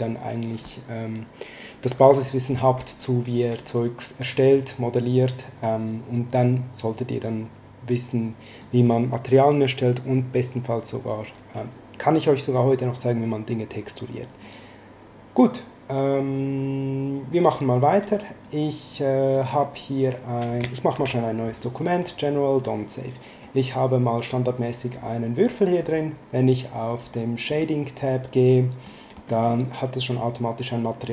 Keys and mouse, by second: 7.9 click, 11.6 click, 14.4 click, 18.4 click, 20.9 ctrl+n, 21.5 click, 22.6 click, 27.5 click, 28.8 middle click.